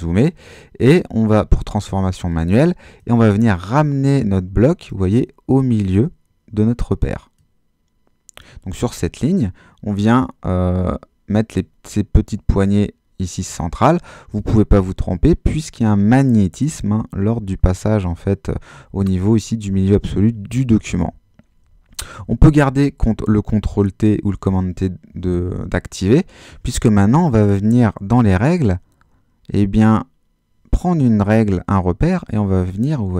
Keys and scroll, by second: 22.4 super+t.